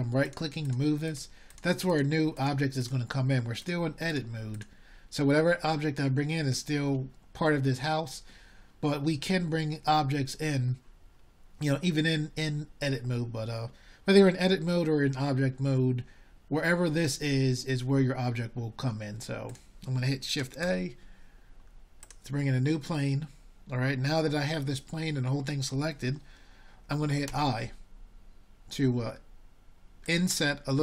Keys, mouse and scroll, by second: 2.8-3.5 drag, 4.2 middle drag.